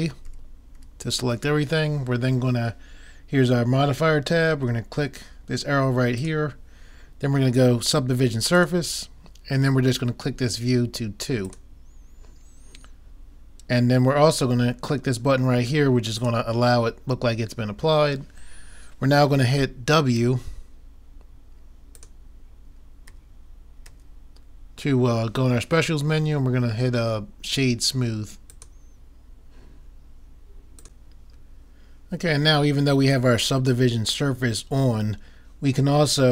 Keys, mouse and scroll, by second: 0.3 a, 0.8 a, 6.2-7.9 drag, 11.5-13.3 drag, 16.3-17.9 drag, 21.9-23.7 drag, 23.7 middle click, 24.0 w.